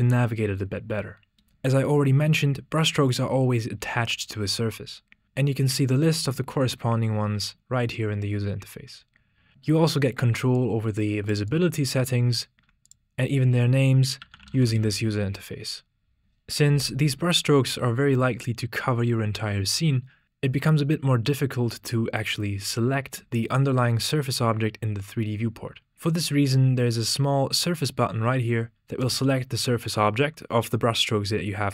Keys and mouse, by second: 10.6-11.3 drag, 12.8-16.2 ctrl+drag, 29.0 click.